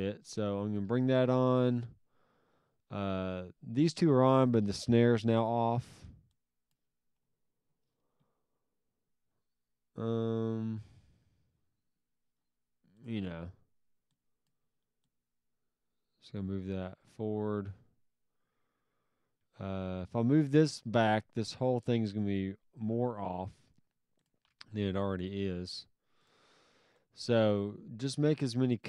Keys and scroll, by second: 5.7 s, 13.2 s, 24.4 s, 26.4 s, 27.5 alt+s.